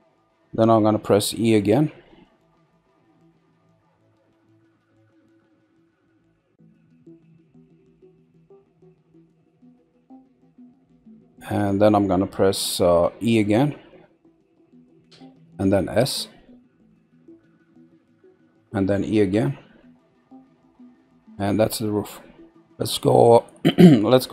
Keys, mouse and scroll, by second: 1.7 e, 10.0 middle click, 11.1-13.4 middle drag, 15.0 e, 20.9 middle click.